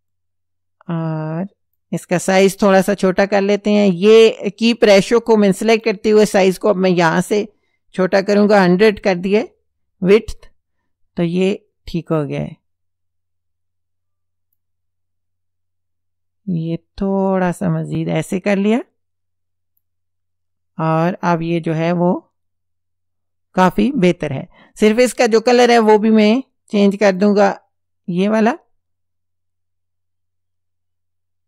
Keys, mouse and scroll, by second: 0.1-2.0 drag, 5.6 click, 6.8 click, 8.2 KP_1, 8.5 KP_0, 9.2 KP_Enter, 11.4-14.8 drag, 16.5 click, 18.9 click, 27.2 click.